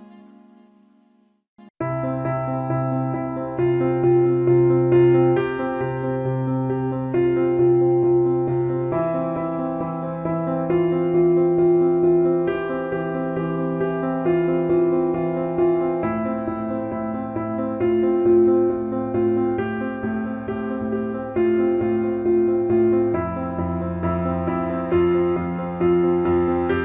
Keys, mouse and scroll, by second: 1.4 alt+shift+middle click, 2.7 Tab, 4.4 alt+shift+middle click, 6.1 click, 6.4 alt+shift+middle click, 7.6 alt+shift+middle click, 7.6 alt+shift+click, 7.8 alt+shift+middle click, 11.7 shift+d, 13.1 middle click, 13.8 click, 14.6 alt+middle click, 15.3 alt+middle click, 18.4 alt+middle click, 21.4 click, 22.4 click, 23.3 alt+shift+middle click, 26.7 alt+shift+middle click.